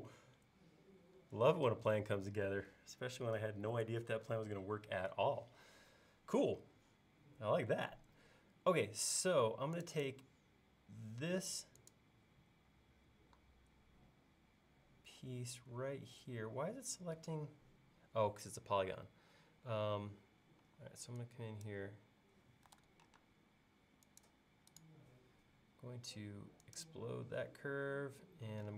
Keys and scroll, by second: 1.7 space, 20.7 e, 22.8 super+z, 23.2 space.